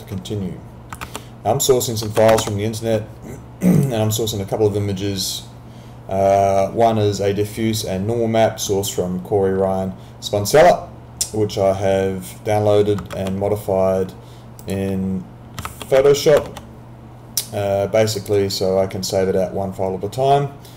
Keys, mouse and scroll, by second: 1.0 alt+Tab, 3.8 click, 13.2 alt+Tab, 14.6 alt+click, 15.7 alt+Tab, 18.2 click.